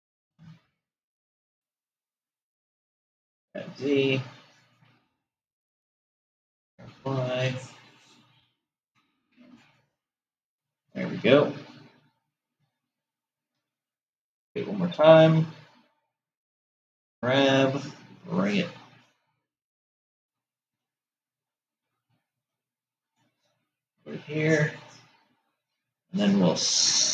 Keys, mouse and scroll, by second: 2.6 g, 6.2 g, 14.6 shift+d, 24.5-27.1 middle drag.